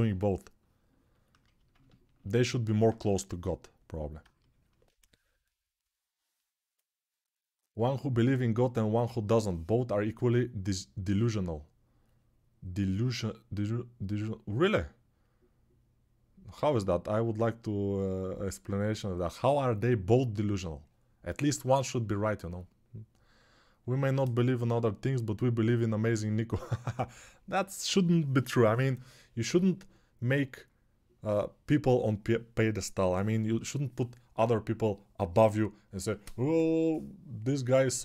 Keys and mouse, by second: 2.7 1.